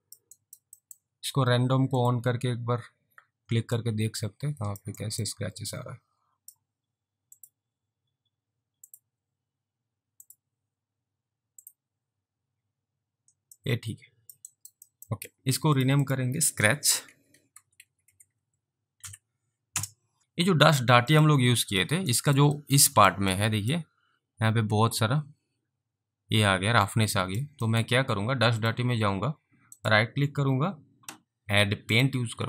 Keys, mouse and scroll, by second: 0.5 alt+right click, 0.9 alt+middle click, 2.0 click, 3.9 alt+click, 5.1 alt+right click, 5.4 alt+click, 7.6 click, 13.7 alt+click, 14.6 alt+right click, 15.0 alt+middle click, 15.3 click, 16.8-19.5 typing, 19.7 Return, 21.2 click, 22.3 alt+right click, 22.7 alt+middle click, 23.0 alt+right click, 23.4 alt+click, 27.3 alt+click, 27.8 alt+middle click, 28.6 click, 29.8 right click, 32.0 click.